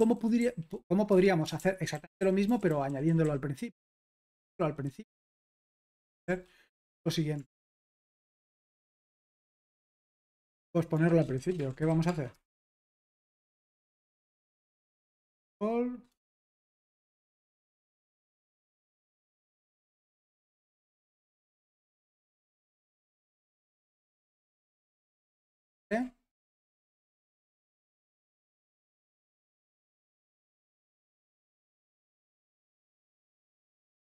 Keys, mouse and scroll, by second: 0.0-0.9 typing, 1.1 Escape, 1.6 super+l, 1.9-6.2 typing, 7.6-13.0 typing, 14.3-18.6 typing, 20.2 typing, 21.5-24.6 typing, 24.6 super+h, 25.9 ctrl+l, 29.2-30.9 typing, 32.2 ctrl+p, 32.8 ctrl+p, 33.1-33.9 typing.